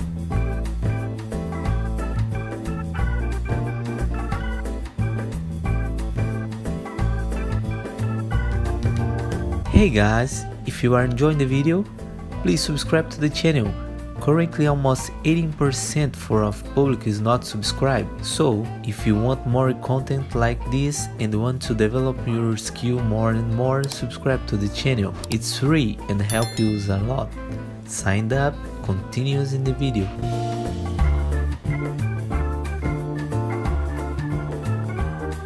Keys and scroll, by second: 4.7 e, 10.3 w, 11.7 F4, 17.1 t, 17.2 z, 19.0 e, 30.5 t, 30.7 z, 31.3 F3, 32.2 ctrl+z, 33.7 e, 34.2 e.